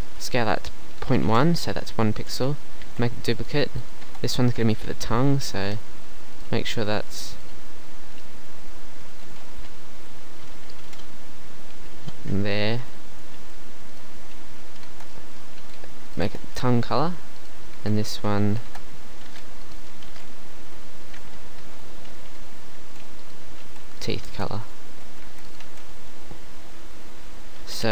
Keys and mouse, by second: 1.0 s, 2.2 KP_1, 2.9 shift+d, 4.1 Tab, 9.0 click, 10.0 a, 10.4 s, 11.8 s, 13.5 g, 14.9 shift+Tab, 15.6 g, 16.3 Tab, 17.8 Tab, 18.7 Tab, 19.2 Delete, 20.1 shift+d, 21.6 Tab, 22.8 g, 23.7 g, 24.3 shift+Tab, 24.6 middle click, 24.9 z, 25.3 Tab, 25.5 middle click, 25.7 z, 27.8 KP_1.